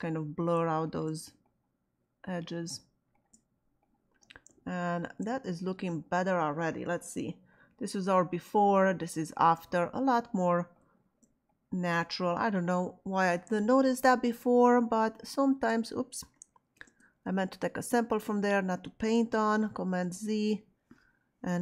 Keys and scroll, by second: 16.7 alt+super+z, 19.9 super+z.